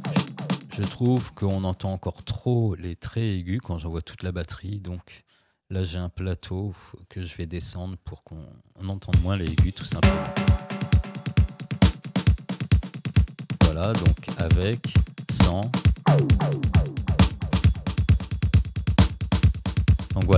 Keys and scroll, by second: 9.1 space.